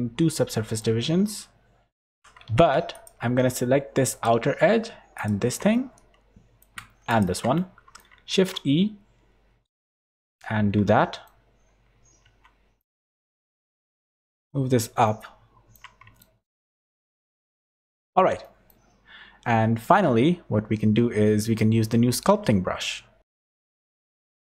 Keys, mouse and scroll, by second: 0.3 middle click, 1.1 Tab, 2.1 2, 2.4 alt+a, 2.9 alt+shift+click, 5.7 middle click, 7.1 alt+shift+click, 7.6 middle click, 8.3 shift+e, 10.2 middle click, 12.2 Tab, 12.8 middle click, 14.1 click, 15.1 middle click, 16.2 shift+middle click, 16.9 middle click, 17.5 Tab, 17.9 Tab, 18.4 middle click.